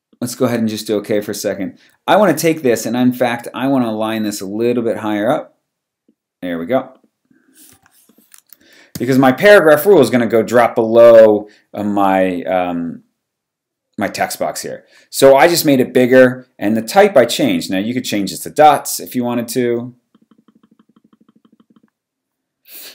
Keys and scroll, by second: 2.4 v, 7.7 t.